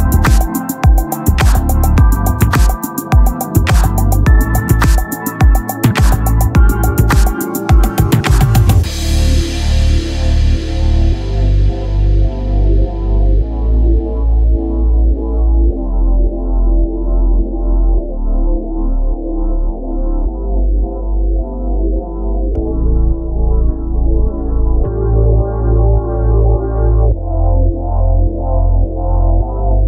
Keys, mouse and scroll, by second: 0.5-2.7 middle drag, 3.2 middle click, 4.0-5.2 right drag, 5.2 middle click, 9.9 Tab, 10.4 ctrl+Tab, 11.1 right click, 11.2 z, 11.4 c, 12.1-14.7 drag, 12.9 c, 13.6 KP_3, 15.9 x, 17.1 z, 18.4 ctrl+z, 19.0 z, 19.5 c, 20.4-22.5 drag, 23.0 KP_3, 23.6 click, 23.9 z, 24.4 z, 24.7 c, 25.7 z, 26.5 click, 27.2-29.4 typing, 28.3-29.4 drag.